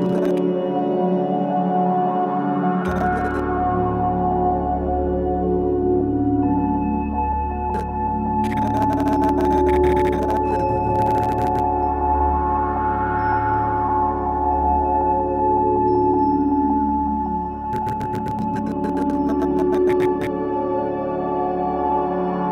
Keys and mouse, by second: 0.0-3.3 drag, 4.4 click, 5.1 click, 7.7-11.5 drag, 12.1 alt+shift+click, 13.2 typing, 14.3 typing, 15.2 click, 17.7-20.2 drag.